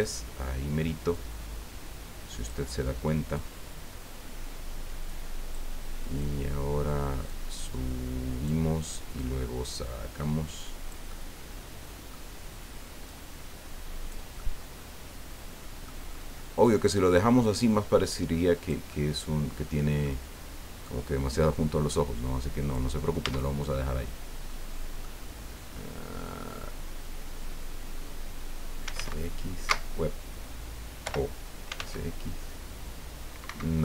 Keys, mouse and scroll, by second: 1.1-2.6 drag, 3.3-5.7 drag, 6.2 middle click, 7.3-8.6 drag, 9.2-12.3 drag, 13.0-14.3 drag, 14.4-16.0 middle drag, 17.4-18.9 drag, 18.9-20.2 middle drag, 20.8-22.9 drag, 23.2 Tab, 23.6 middle click, 23.9-25.1 drag, 28.8 s, 28.9 x, 29.6 Escape, 31.0 o, 31.7 s, 31.8 x, 33.4 Escape.